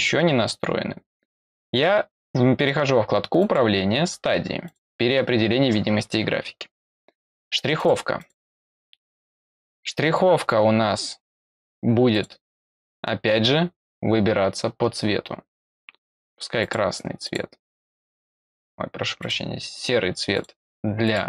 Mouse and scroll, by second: 3.3 click, 4.6 click, 7.7 click, 8.1 click, 12.1 click, 16.5 click, 17.2 click, 19.1 click, 20.3 click, 21.0 click.